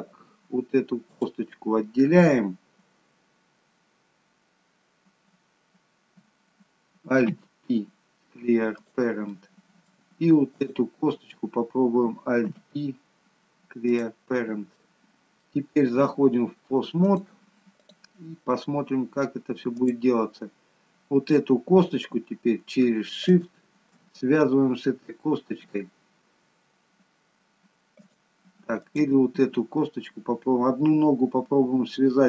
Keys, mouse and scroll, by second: 1.1 click, 7.3 alt+p, 9.4 middle click, 10.7 click, 12.6 alt+p, 14.8 middle click, 14.8 scroll down 2, 17.0 click, 19.7 click, 20.8-22.8 scroll up 2, 23.4 shift+click, 27.9 click, 28.8 click.